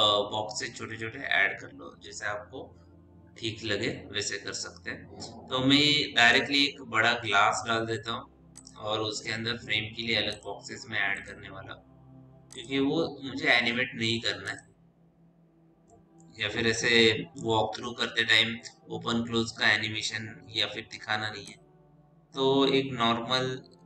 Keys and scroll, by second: 6.7 f.